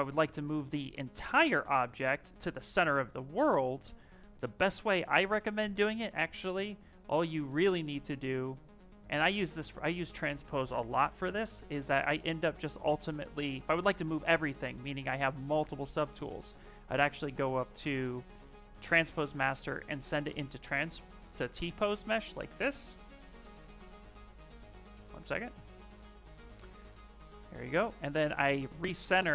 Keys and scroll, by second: 3.3 q, 26.3 w, 27.1 w.